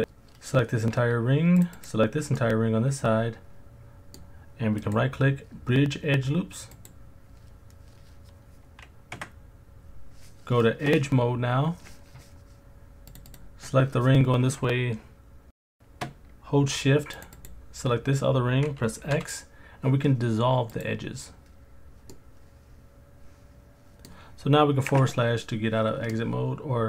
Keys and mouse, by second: 1.8 shift+click, 2.4-4.2 middle drag, 4.8-6.9 drag, 9.2 2, 13.1 click, 13.3 click, 17.3 shift+click, 19.1 x, 22.1-24.0 middle drag, 24.9 KP_Divide, 26.1 middle click.